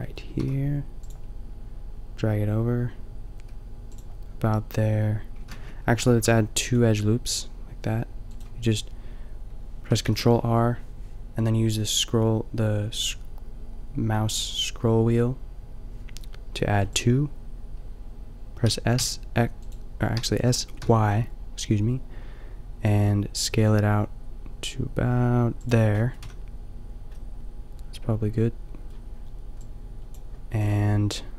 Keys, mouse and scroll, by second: 0.4 ctrl+r, 5.5 ctrl+z, 5.5 click, 6.3 ctrl+r, 8.4-11.8 drag, 10.1 ctrl+r, 16.9-22.4 drag, 18.6 s, 20.2 s, 25.7 click, 26.3 a, 27.4-29.2 middle drag, 29.9-31.3 drag.